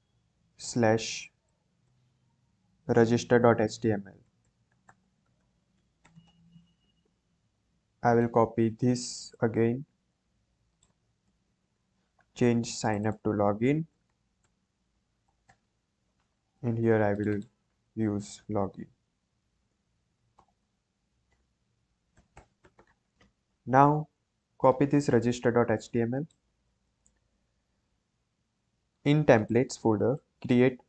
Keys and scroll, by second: 0.0-1.8 typing, 4.0-6.8 typing, 10.1 ctrl+d, 11.2 Return, 11.5 BackSpace, 13.6-15.9 typing, 19.0-23.3 typing, 26.6 ctrl+c.